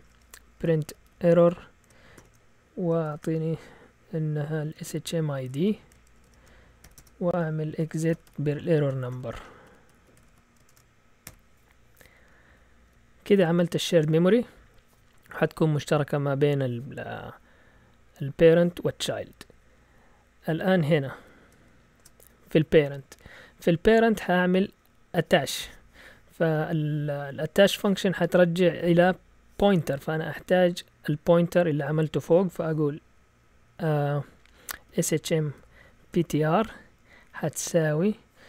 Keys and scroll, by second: 0.4-3.1 typing, 4.5-13.4 typing, 7.0 Return, 19.3 Down, 19.9 Down, 21.2 End, 22.0 Return, 34.6-37.5 typing.